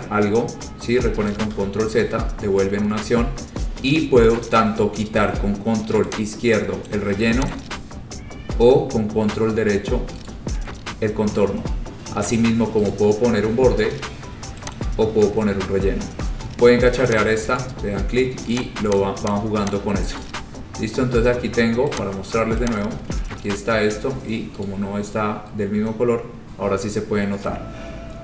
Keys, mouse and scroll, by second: 1.7 ctrl+z, 7.0 click, 7.7 click, 10.4 right click, 13.1 right click, 14.9 click, 17.3 click, 17.7 right click, 18.7 click, 19.1 click, 19.5 click, 19.8 click, 20.3 right click, 22.2 click, 22.8 click, 24.7 right click, 26.5-27.1 scroll, 27.1 scroll down 4, 27.3 scroll, 28.0-28.2 scroll.